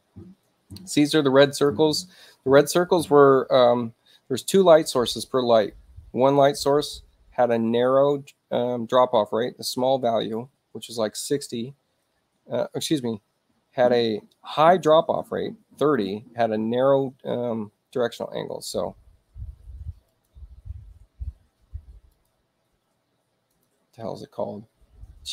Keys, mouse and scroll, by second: 1.6 click, 20.1 click, 22.2 click, 23.5 click.